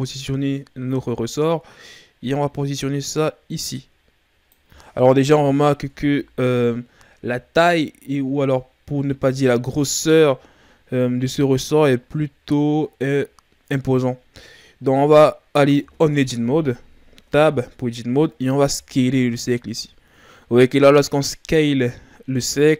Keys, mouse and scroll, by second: 0.9 click, 5.2 KP_1, 5.9 Tab, 6.5-7.4 scroll down 6, 7.4-8.0 scroll down 4, 8.0-9.3 scroll up 9, 9.3-10.0 scroll up 4, 10.0-10.4 scroll down 3, 10.4-11.1 shift+scroll up 1, 11.9-12.7 scroll down 2, 12.7-13.1 shift+scroll down 1, 13.2-14.8 scroll up 5, 15.8 Tab, 17.2 Tab, 18.6 s.